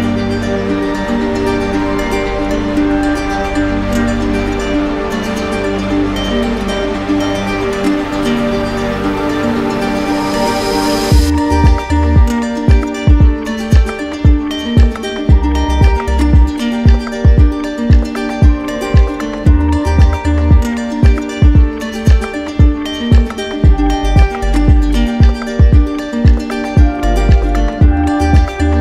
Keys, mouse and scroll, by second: 0.3 shift+right click, 1.1 alt+right click, 1.9 q, 9.6-11.3 right drag, 12.1-13.2 right drag, 13.7 r, 19.1 click, 20.3 right click, 21.5 right click, 22.1 right click, 24.3 click, 26.1 click, 26.8 right click, 27.5 right click, 28.0 shift+right click, 28.7 shift+right click.